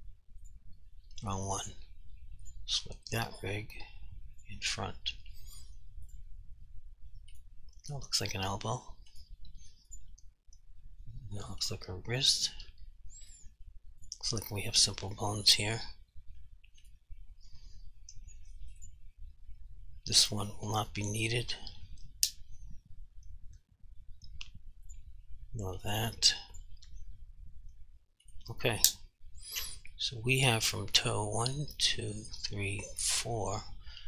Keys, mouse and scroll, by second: 6.5 r, 7.4 right click, 8.4 r, 9.2 right click, 9.9 click, 11.0 r, 11.7 right click, 12.4 click, 12.7 r, 13.3 right click, 14.0 click, 14.5 r, 15.1 right click, 16.4 r, 16.9 right click, 18.8 click, 19.4 g, 21.2 right click, 24.9 click, 25.2 g, 25.8 right click, 26.6 click, 26.8 r, 28.3 right click.